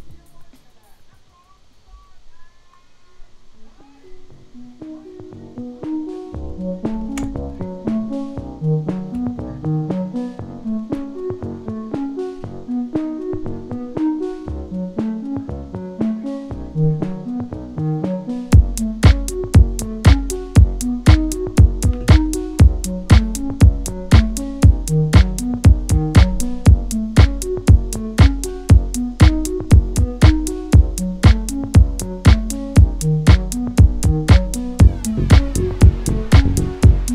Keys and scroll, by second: 6.9 ctrl+t.